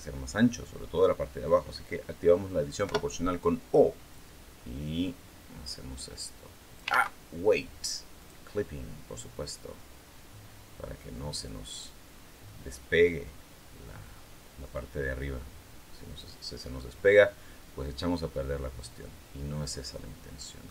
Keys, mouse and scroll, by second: 2.6 o, 3.9 click, 4.8-5.5 scroll down 4, 5.8-6.1 scroll down 2, 6.7 ctrl+z, 8.0 click, 9.3 click, 10.4-11.2 scroll down 3, 12.8 scroll up 2, 16.2-16.6 scroll down 2, 16.6-20.6 middle drag.